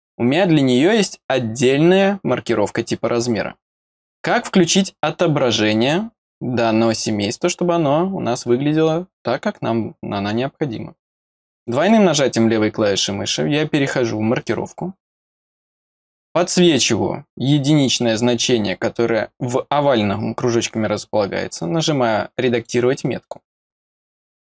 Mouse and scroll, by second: 0.3 middle click, 0.7 middle click, 1.5 click, 3.7 click, 4.2 click, 5.8 click, 11.6 click, 11.8 click, 15.4 click, 22.5 click.